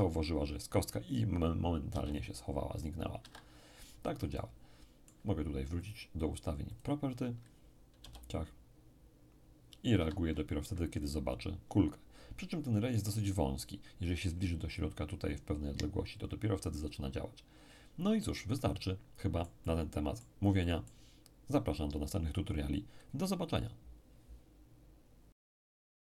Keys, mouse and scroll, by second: 1.9 p, 3.2 Escape, 4.3-7.7 middle drag, 5.8-7.7 drag, 8.0 p, 9.9 Escape, 18.1-21.8 middle drag.